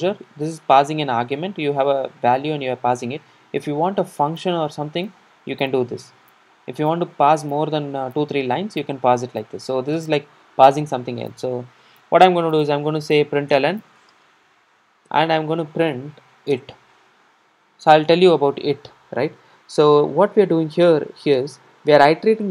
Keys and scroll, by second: 18.4 super+r.